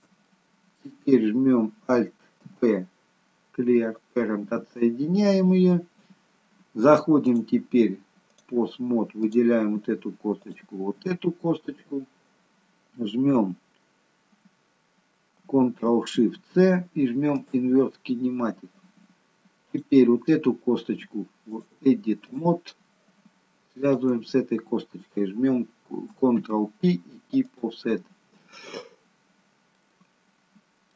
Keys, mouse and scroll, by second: 0.3 middle click, 2.6 alt+p, 5.7 scroll down 1, 7.3 click, 9.2 click, 10.4 shift+click, 16.5 ctrl+shift+c, 19.8 click, 21.5 click, 23.8 shift+click, 26.4 ctrl+p, 29.9 middle click, 29.9 scroll down 1.